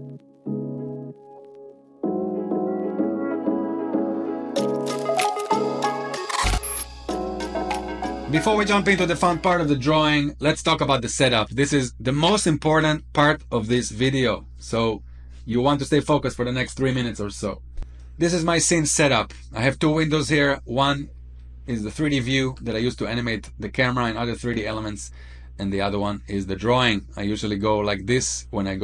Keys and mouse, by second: 0.0 click, 1.0-1.3 shift+middle drag, 1.5 middle drag, 2.4 shift+middle drag, 2.7-3.6 middle drag, 4.6-5.2 middle drag, 17.9-18.6 middle drag, 21.3-21.8 middle drag, 22.0-22.3 shift+middle drag, 25.9-28.8 drag.